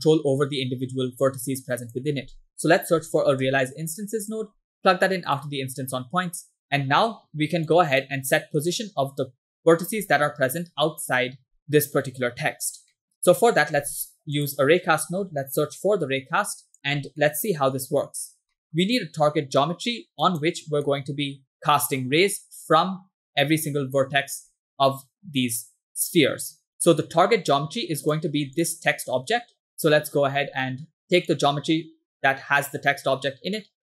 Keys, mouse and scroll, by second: 1.2 shift+a, 6.3 click, 6.8 middle click, 7.8 click, 8.4 middle click, 9.6 middle click, 11.5 scroll down 3, 11.6 middle click, 12.9 middle click, 13.2 scroll down 2, 13.4 middle click, 13.8 shift+a, 17.0 scroll down 2, 17.2 middle click, 17.6 scroll up 1, 17.9 click, 18.6 scroll down 1, 18.6 middle click, 19.8 click, 20.9 middle click, 21.3 scroll up 1, 24.5 middle click, 27.2 click, 28.1 right drag, 28.6 click, 29.8 click, 30.4 scroll down 2, 30.7 middle click, 31.4-33.8 drag.